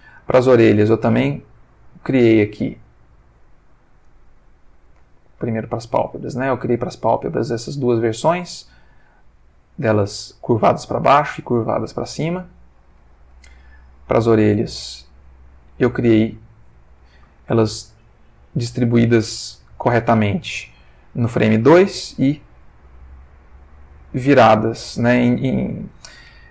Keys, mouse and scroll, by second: 0.6-2.1 drag, 2.8 click, 4.0 click, 4.7 Tab, 5.9-13.1 drag, 13.2 Tab, 14.4 click, 15.0 Tab, 16.2 click, 17.5 ctrl+middle click, 18.0 ctrl+shift+scroll up 2, 18.2 ctrl+shift+middle click, 19.1 ctrl+shift+middle click, 21.9-26.0 drag.